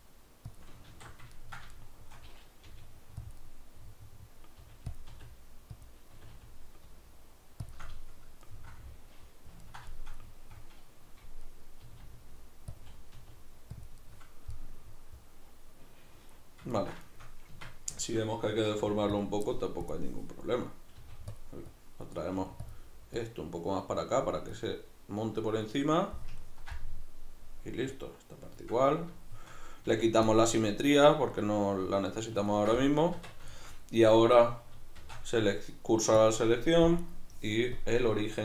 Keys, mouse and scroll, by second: 0.6 click, 0.9 alt+q, 1.3-3.3 ctrl+middle drag, 2.7 g, 3.3 click, 3.4-4.6 middle drag, 4.6 g, 5.0 click, 5.1 r, 5.9 click, 6.1 r, 7.7 shift+click, 7.9-12.8 middle drag, 11.8 r, 12.8 click, 13.1 r, 13.9 click, 14.0-19.2 middle drag, 17.5 Tab, 18.8 f, 19.2 click, 21.0 middle click, 21.0 f, 21.4 click, 22.3 click, 22.3 f, 25.6-27.9 middle drag, 27.9 click, 28.9-30.3 middle drag, 29.9 f, 30.3 click, 31.3-34.3 middle drag, 33.1 Tab, 34.3 right click, 35.0 shift+s, 37.0 right click, 37.8-38.4 drag.